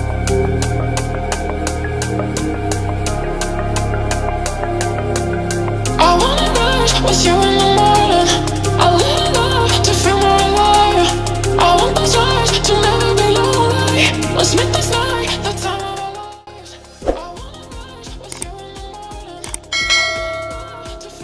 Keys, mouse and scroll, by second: 1.1 click, 2.3 click, 5.2-6.0 drag, 6.9-8.1 drag, 8.8-9.9 drag, 10.6 space, 20.2 space.